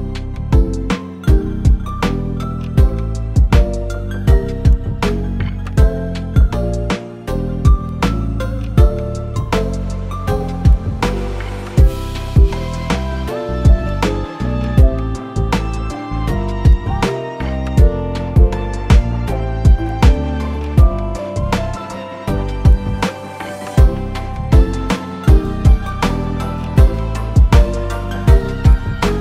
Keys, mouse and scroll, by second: 0.1 Tab, 1.5 a, 1.8 u, 4.1 click, 4.5 middle click, 6.2 r, 8.0 s, 8.6 g, 9.6 middle click, 12.5 scroll down 1, 12.7 Tab, 13.1 click, 13.4 Tab, 14.2 a, 15.3 click, 16.1 u, 17.5 Tab, 18.8 Tab, 19.6 click, 20.4 scroll up 2, 20.7 shift+middle click, 21.0 scroll down 1, 21.3 r, 23.0 s, 24.6 Tab, 25.3 shift+middle click, 25.8 click, 26.0 middle click, 26.3 Tab, 27.5 click, 28.3 u.